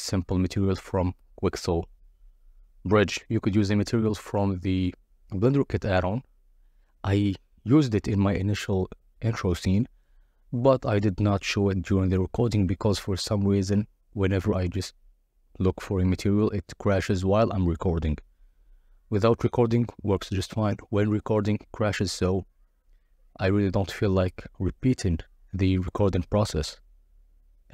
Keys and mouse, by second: 0.3 click, 1.4-2.1 drag, 3.3-4.2 drag, 5.3-5.9 drag, 6.1 shift+a, 8.9-9.8 drag, 10.1-11.0 drag, 13.3 click, 13.9 z, 14.7 Tab, 14.8 Tab, 15.0 Tab, 15.3-16.8 typing, 18.8-20.5 typing, 20.8 Return, 21.7 KP_0, 22.9 s, 23.0 2, 24.2 Tab, 24.6 click, 25.1 middle click, 25.5 click, 27.1 click.